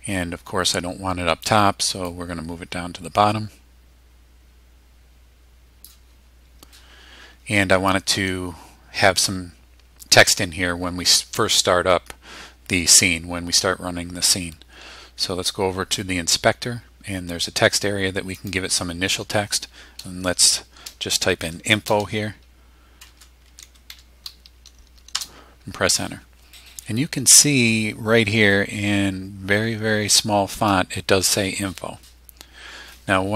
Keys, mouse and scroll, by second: 2.1-6.0 drag, 18.4 click, 21.4 shift+i, 22.0 shift+f, 23.1-24.4 typing, 25.2 Return.